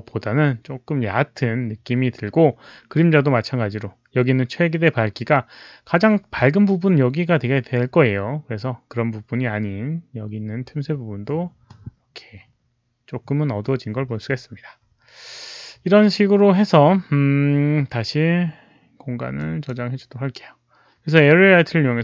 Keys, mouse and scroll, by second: 2.8 Return, 2.8 click, 2.8 KP_5, 19.3 click.